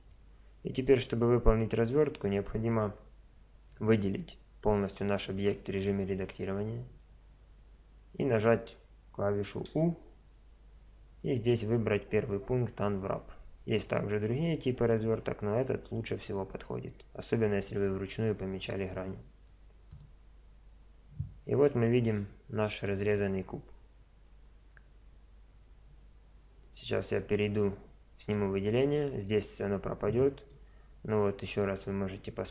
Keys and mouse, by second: 5.6 a, 9.7 u, 28.2 a, 30.5-32.4 middle drag.